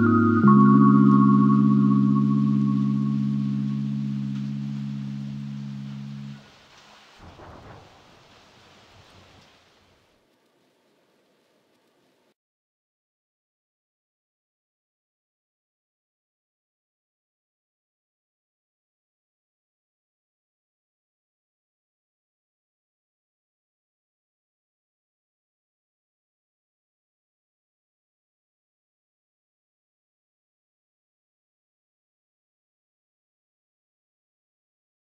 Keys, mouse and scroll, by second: 0.0 scroll down 5, 0.2 double click, 0.3 shift+click, 1.4 scroll down 9, 1.7 scroll up 11, 1.9 space, 2.2 double click, 2.4 scroll up 3, 2.7 double click, 3.0 ctrl+v, 3.6-4.3 scroll up 10, 4.3 space, 4.3 double click, 4.6 double click, 5.0 shift+click, 5.2 scroll down 4, 6.1 space, 6.2 double click, 6.3 shift+click, 6.9 space, 7.1 double click, 7.5 shift+click, 8.1-8.4 scroll down 12, 8.4 scroll up 1, 8.5 space, 8.7 scroll down 1, 8.9 shift+click, 9.4-10.0 scroll up 11, 10.1 middle click, 10.2-10.7 scroll down 14, 10.4 middle click, 10.8 middle click, 11.0 scroll up 6, 11.5 space, 11.6 scroll down 1, 11.7 middle click, 12.2 scroll down 11, 12.3 middle click, 12.7 Delete, 12.9 Delete, 13.0 scroll up 17, 13.3-13.8 scroll down 5, 13.6 middle click, 14.1 m, 15.3 m, 16.6 m, 17.3 middle click, 17.4 scroll up 7, 17.5 space, 17.8 middle click, 18.7 scroll down 9, 18.9 space, 19.2 Delete, 19.4 Delete, 19.6 Delete, 19.6 middle click, 19.8 scroll up 4, 20.1 ctrl+z, 20.7 Delete, 20.9 Delete, 21.2-21.6 scroll down 2, 21.3 middle click, 21.6 middle click, 21.8 middle click, 21.9 scroll up 7, 22.1 typing, 22.6 scroll down 11, 22.8 middle click, 24.6-26.7 typing, 25.1 middle click, 26.7 Return, 27.0 middle click, 27.1 scroll down 1, 27.2 scroll up 9, 27.5 middle click, 27.7 scroll down 10, 27.8 middle click, 27.9-32.1 typing, 29.5 Return, 30.7 Return, 31.0 scroll down 1, 31.1 middle click, 31.2 scroll up 5, 32.2 Return, 32.5 double click, 32.6 middle click, 32.9 scroll down 5, 32.9 middle click, 33.1 space.